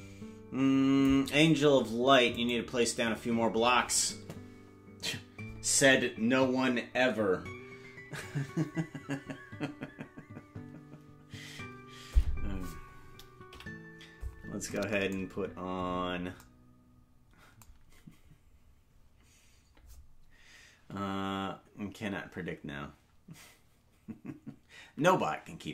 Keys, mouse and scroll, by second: 2.5 right click, 13.5 KP_Decimal, 15.2-16.0 scroll down 8.